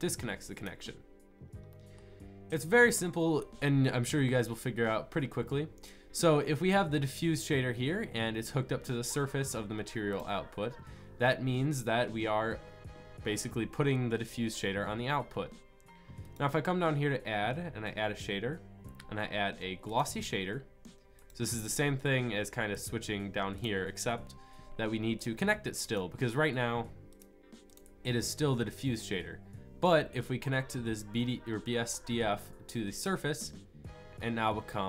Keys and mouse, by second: 27.0-27.4 drag.